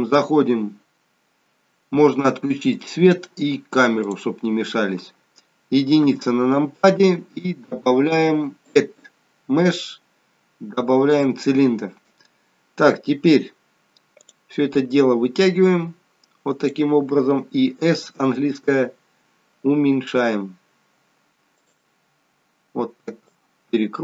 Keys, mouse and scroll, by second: 0.1 scroll down 3, 0.8 scroll up 1, 1.2 scroll down 1, 2.6 click, 4.1 click, 4.8-6.1 scroll up 2, 6.1 KP_1, 8.8 click, 14.1 click, 15.6 click, 17.7 s, 19.9 s, 23.2 click.